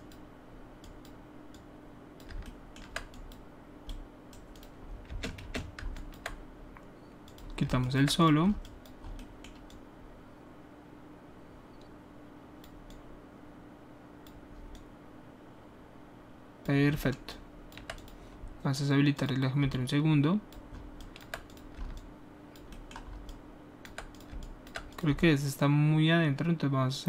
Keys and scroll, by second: 5.0 space, 5.4 space.